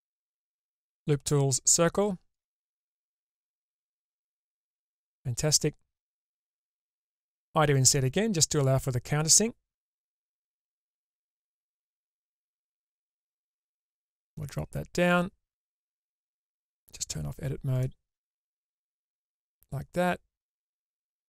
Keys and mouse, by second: 3.7-6.3 middle drag, 12.5 middle click, 14.5-16.9 drag, 17.9 click, 19.2-20.9 drag.